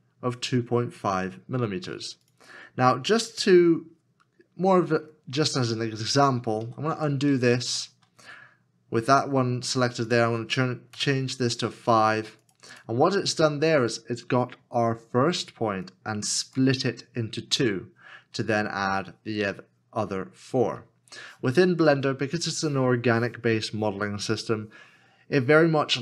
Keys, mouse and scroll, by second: 6.6 ctrl+z, 6.9 ctrl+z, 7.3 ctrl+z, 7.6 ctrl+z, 10.9 KP_5.